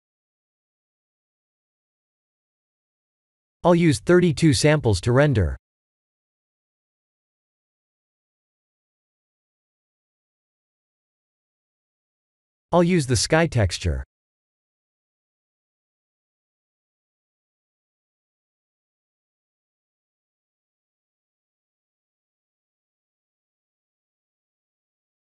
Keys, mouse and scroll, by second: 1.8 click, 3.7 click, 4.8 click, 11.3 click, 12.8 click, 18.4 click, 22.7 click, 24.6 click.